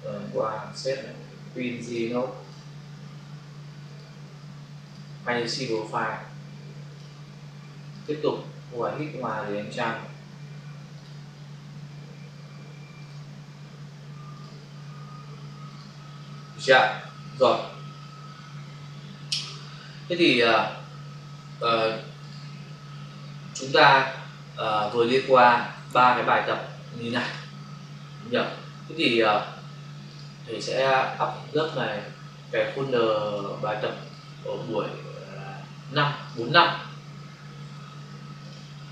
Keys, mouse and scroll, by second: 0.1 ctrl+shift+s, 1.7 click, 1.8 click, 3.8 click, 3.9 click, 4.7 click, 4.9 click, 5.6 double click, 6.8 click, 6.9 click, 9.1 ctrl+shift+s, 10.9 click, 11.0 click, 12.9 click, 13.1 click, 14.3 click, 14.4 click, 15.8 click, 17.2 ctrl+alt+w, 22.2 click, 22.3 click, 24.7 click, 24.8 click, 27.0 click, 28.9 click, 30.0 click, 30.2 click, 31.5 click, 33.2 click, 33.3 click, 36.1 click, 36.3 click, 38.4 click, 38.5 click.